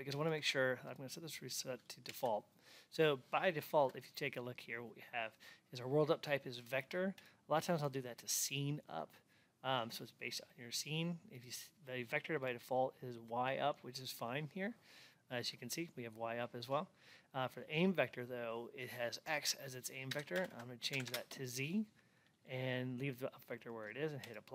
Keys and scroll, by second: 20.2 Tab, 21.0 Return.